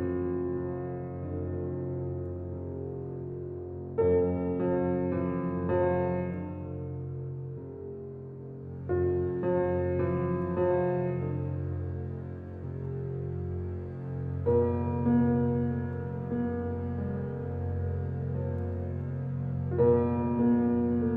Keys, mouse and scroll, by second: 3.9 middle drag, 4.4 middle click, 5.0 click, 5.7-6.8 shift+middle drag, 6.8 Tab, 8.1 click, 8.5 click, 11.3 click, 12.2-13.7 drag, 14.0 Tab, 15.9-17.1 shift+middle drag, 17.1 drag, 18.5 drag, 20.2 Tab, 20.6 click.